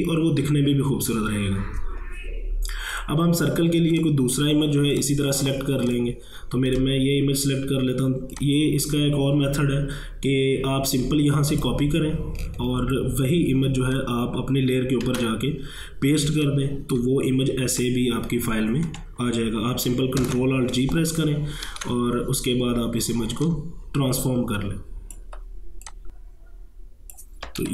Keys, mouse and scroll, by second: 2.9 click, 4.6 scroll down 1, 5.0 click, 5.4 scroll down 1, 5.9 click, 6.7 right click, 8.4-12.8 drag, 15.0 ctrl+v, 16.3 ctrl+space, 16.4 ctrl+click, 16.8 ctrl+space, 17.8-20.2 drag, 20.2 ctrl+alt+g, 21.7 ctrl+t, 23.4-25.9 drag, 25.9-27.7 drag.